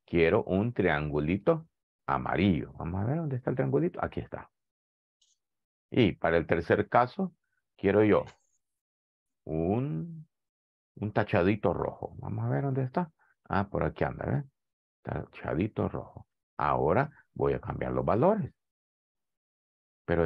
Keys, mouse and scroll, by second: 3.3 click, 5.2 click, 12.8 click.